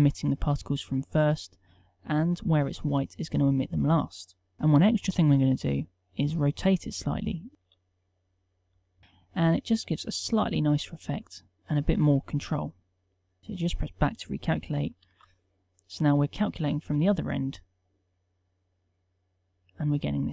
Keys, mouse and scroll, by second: 12.1 Tab, 15.1 alt+a.